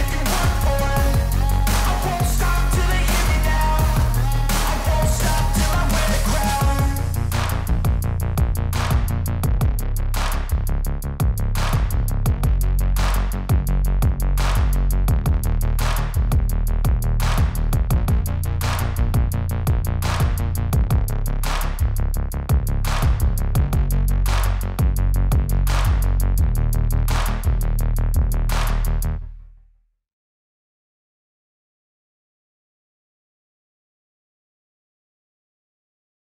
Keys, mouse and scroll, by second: 0.7 click, 1.1 click, 2.5 click, 3.1 click, 3.4 click, 5.8 click, 6.8 click, 7.5 click, 8.1 click, 8.7 click, 9.3-10.7 typing, 11.9 click, 12.4 click, 12.4-13.4 typing, 14.0 click, 14.9 click, 15.3-16.1 typing, 16.1 click, 16.5-17.5 scroll, 18.4 click, 19.3 click, 20.0-21.1 typing, 21.7 click, 23.0 typing, 23.6 click, 24.5 click, 25.6 click, 27.7 click, 31.0 click, 31.2 click, 31.4 click, 31.6 click.